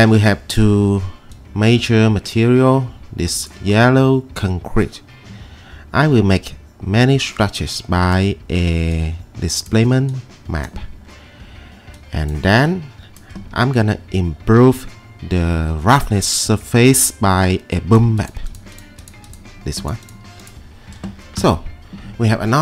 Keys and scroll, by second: 14.5 e, 21.4 e.